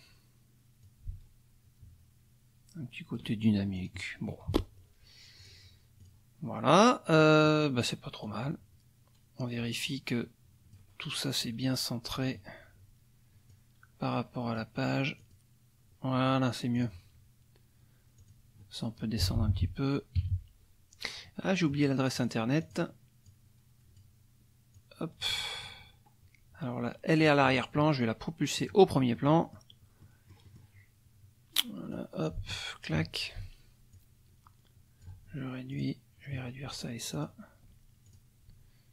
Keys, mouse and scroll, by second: 0.8-3.3 ctrl+drag, 3.8 click, 4.5 KP_Subtract, 5.4 click, 6.0 click, 7.2 click, 8.2-10.9 drag, 13.5-14.7 drag, 15.2 click, 16.7 click, 18.2 click, 19.2 Down, 21.4 middle click, 22.1 click, 22.6 click, 23.2-24.2 drag, 24.7-27.4 drag, 28.6 click, 29.1 middle click, 30.0 middle click, 31.9-33.1 drag, 33.9-35.2 ctrl+drag, 35.7 click, 37.1 shift+click, 38.0 shift+click.